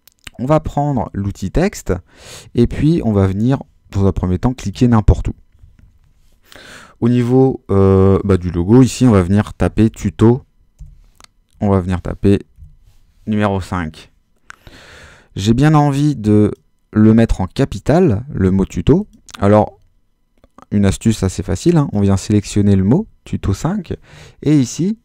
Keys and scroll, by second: 8.7-12.6 typing.